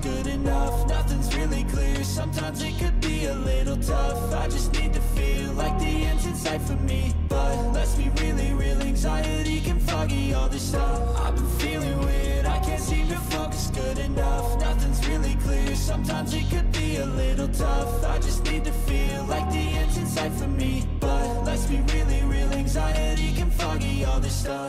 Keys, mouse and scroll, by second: 6.9 double click, 14.5 ctrl+=, 15.1 ctrl+=, 16.0-17.4 scroll down 4, 20.3 double click, 22.9 Return, 24.2 Return.